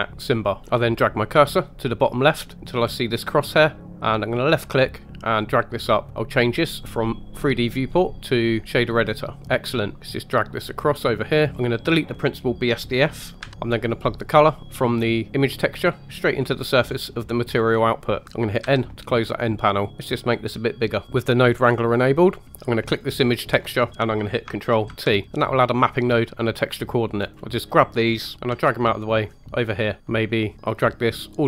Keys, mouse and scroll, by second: 3.8 click, 5.6 click, 6.7-9.1 drag, 9.4-9.7 scroll up 2, 9.7 middle click, 10.0 click, 11.5 click, 13.5 x, 14.6 click, 16.7-17.4 scroll up 2, 17.4 scroll down 2, 18.6 n, 19.9 click, 21.0 middle click, 21.6-22.0 scroll up 2, 22.0-22.5 middle drag, 22.8 click, 24.9 ctrl+t, 27.3 click, 28.0 scroll down 2, 28.4 g, 30.0 click, 30.0-30.5 scroll down 2, 30.5 middle click, 30.7 click.